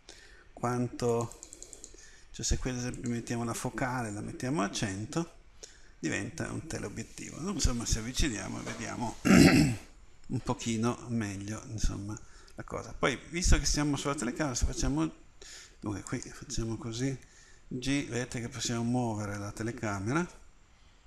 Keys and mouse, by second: 4.8 0, 17.2 g, 18.7 middle click.